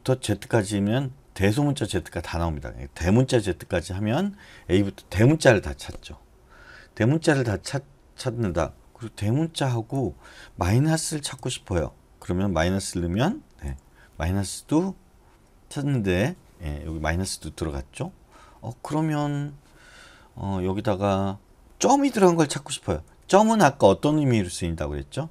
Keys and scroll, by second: 1.7 BackSpace, 1.9 BackSpace, 3.0-3.7 typing, 9.9 BackSpace, 11.3 typing, 13.7 ], 23.1 BackSpace.